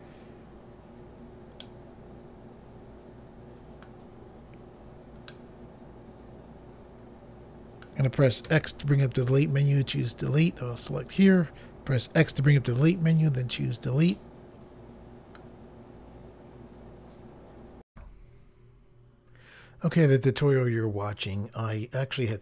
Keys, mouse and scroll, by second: 1.6 middle click, 5.3 middle click, 8.5 x, 10.0 click, 11.1 click, 12.2 x, 13.3 click, 14.1 middle click.